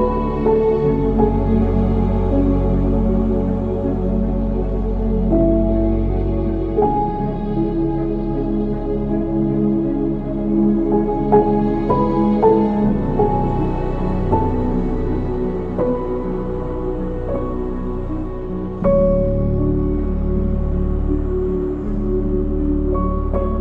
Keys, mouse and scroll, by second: 1.4-4.0 drag, 4.0-7.0 middle drag, 13.6 shift+a, 16.3 ctrl+alt+KP_0, 17.8 g, 21.0 ctrl+s, 21.7 click, 22.4 g.